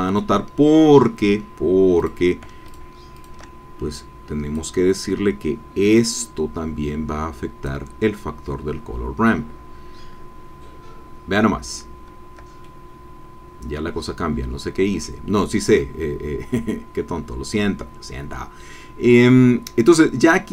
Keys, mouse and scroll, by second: 0.6-1.6 scroll down 2, 2.0 click, 2.6 shift+click, 3.2 shift+click, 3.9 click, 5.9-7.8 drag, 12.6 shift+middle click, 12.8 click, 12.9 middle click, 13.6-15.2 drag.